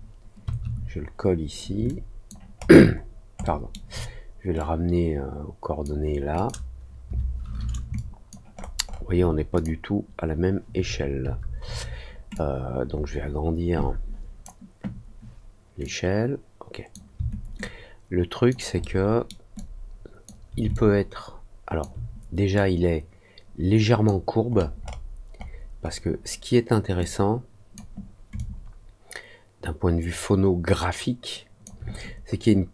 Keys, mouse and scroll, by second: 1.8 alt+click, 2.5 alt+scroll down 1, 3.4 alt+middle click, 4.5-5.8 drag, 6.3 click, 7.9 alt+click, 8.5 alt+middle click, 8.8 alt+middle click, 9.5 click, 12.3-14.4 drag, 15.8-16.9 drag, 17.5 alt+click, 18.7 alt+middle click, 19.5 alt+click, 20.7-21.7 alt+drag, 22.5-24.0 drag, 24.4 middle click, 24.7 middle click, 25.3 middle click, 25.7 middle click, 26.9 click, 28.3-31.6 alt+drag.